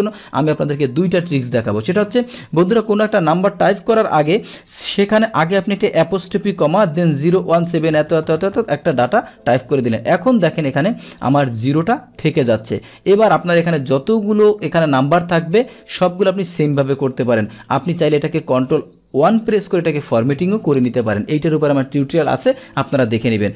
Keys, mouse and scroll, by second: 2.6 Delete, 9.6 Return, 11.2 click, 17.9 click, 22.8 Delete.